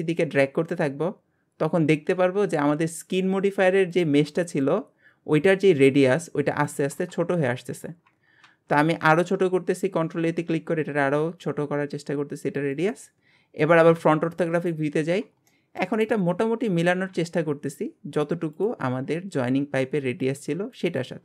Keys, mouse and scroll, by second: 13.9 KP_1, 14.7-15.5 scroll up 1, 15.5 shift+middle click, 16.0-16.7 scroll up 4, 17.1 ctrl+a, 19.1-21.2 scroll down 3.